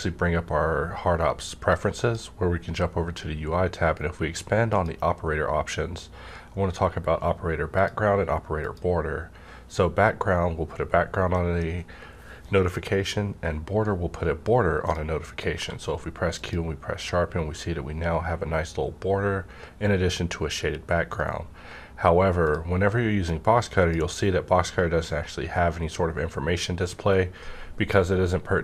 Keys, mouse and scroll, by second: 1.7-4.5 drag, 4.6-7.2 drag, 7.7 click, 7.8 click, 15.0 click, 15.5 q, 16.3 click, 22.4-26.4 drag.